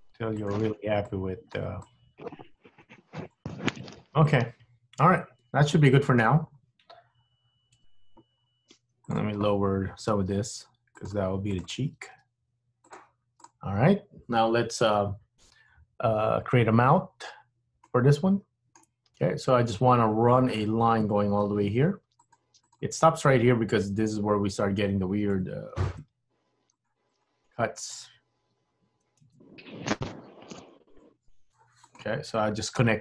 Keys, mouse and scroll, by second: 1.2 click, 1.9 click, 2.6 g, 3.8 scroll up 1, 3.9 scroll down 4, 4.2 middle click, 6.3 scroll up 1, 6.5-6.9 scroll down 2, 7.2-7.6 scroll up 3, 7.9 KP_1, 8.5 scroll up 1, 9.2 click, 10.2 g, 11.6 click, 12.2 g, 13.5 click, 16.7-17.1 scroll down 2, 17.9 middle click, 17.9-18.6 scroll down 1, 21.6 ctrl+r, 26.0 ctrl+r, 29.3 super+z, 30.5 ctrl+r, 32.8 k.